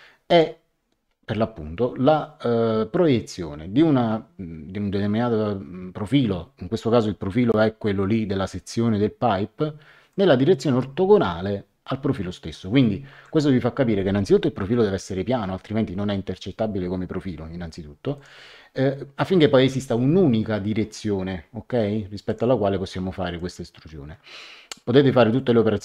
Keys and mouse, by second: 0.3 click, 10.1 click, 13.1 Escape, 18.1 click, 22.2 click, 23.3 click.